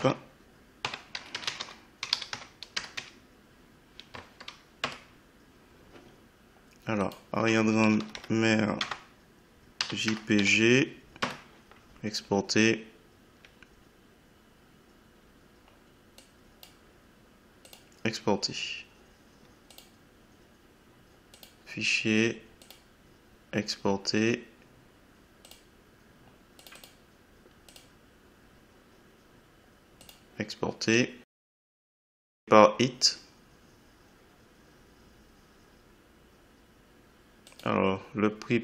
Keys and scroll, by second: 0.0 Caps_Lock, 0.9-2.6 typing, 4.8 Return, 7.8 BackSpace, 8.8 Caps_Lock, 9.5-10.9 typing, 11.2 Return.